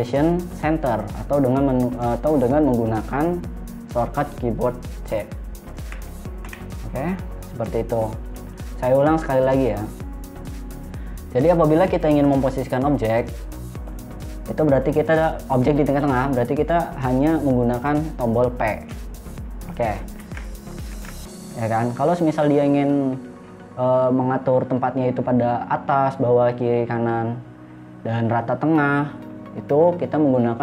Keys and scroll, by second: 6.9 c, 19.3 p, 20.6 ctrl+z, 21.4 ctrl+z.